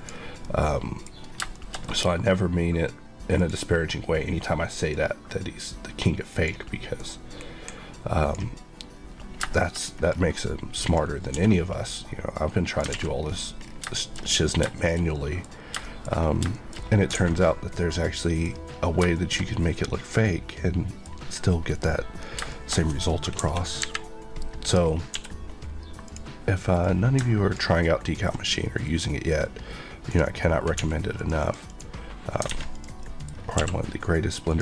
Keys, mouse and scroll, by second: 0.4 middle click, 1.2 middle click, 1.2 scroll down 1, 1.5 shift+middle click, 2.7 middle click, 3.3 middle click, 3.4 click, 4.8 click, 6.9 click, 7.4 q, 9.5 middle click, 9.7 scroll up 1, 10.8 click, 11.3 s, 12.6 click, 12.9 alt+a, 13.1 scroll down 1, 13.9 shift+middle click, 14.1 scroll up 1, 14.7 shift+middle click, 15.5-15.8 scroll up 2, 15.8 shift+middle click, 16.2-17.1 scroll down 4, 16.5 shift+middle click, 17.3 a, 17.4 middle click, 18.6-19.1 scroll down 2, 19.1 shift+middle click, 21.2-21.7 scroll up 1, 21.7 click, 22.1 scroll, 22.3-23.3 shift+scroll up 2, 22.4 shift+middle click, 23.3 KP_1, 23.8 KP_3, 24.8-25.1 scroll up 1, 25.1 d, 26.0 click, 26.7 click, 30.7 click, 30.7 x, 31.2 click, 31.4 Left, 32.5 alt+a, 32.7 click, 33.0 middle click, 33.3 scroll up 1, 33.5 q, 34.4 click.